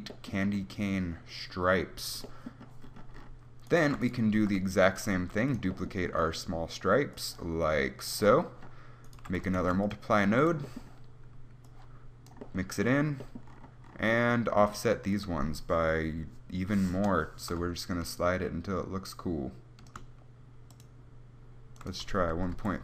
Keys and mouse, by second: 4.7 shift+d, 5.5 g, 9.3-13.9 drag, 9.4 g, 9.9 shift+d, 10.5 g.